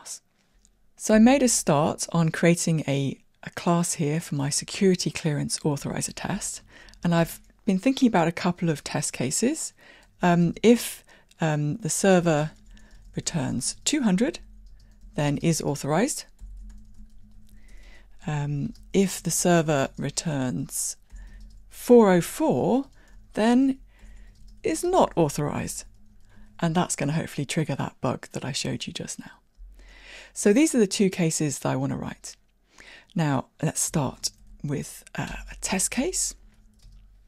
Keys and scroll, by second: 35.4 Return.